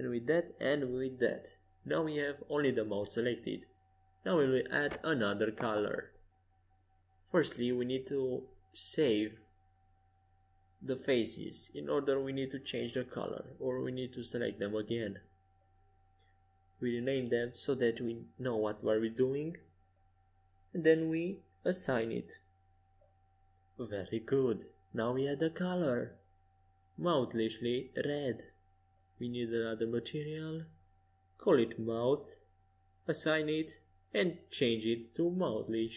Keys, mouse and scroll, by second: 2.4-4.9 middle drag, 4.9-9.0 drag, 12.3-15.7 drag, 17.5 BackSpace, 22.4-32.1 drag, 33.5-35.9 drag.